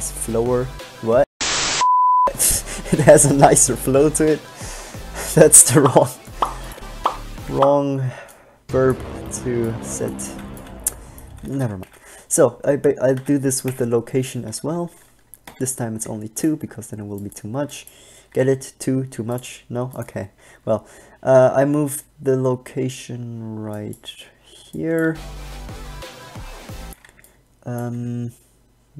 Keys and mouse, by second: 7.7 alt+a, 11.5 Right, 11.6 Right, 12.1 Left, 13.4 Left, 13.9 Left, 15.6 i, 17.8 b, 18.5 g, 20.1-21.2 drag, 20.3 g, 24.1-25.2 drag, 25.2 alt+a, 27.0 alt+a, 28.1 g.